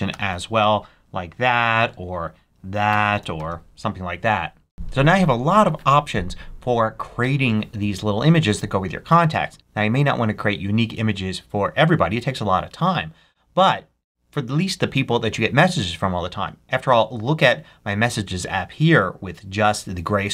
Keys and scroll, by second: 0.0-1.7 typing, 2.9 BackSpace, 3.1 shift+4.